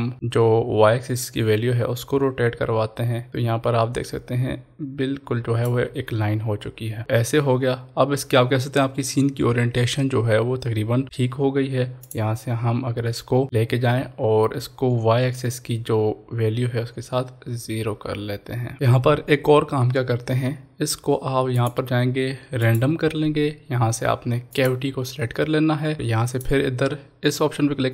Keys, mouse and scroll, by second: 5.4 shift+click, 7.7-9.8 scroll down 2, 12.0-18.7 drag, 18.7 ctrl+s, 21.5 ctrl+s, 21.6 click, 26.3 click.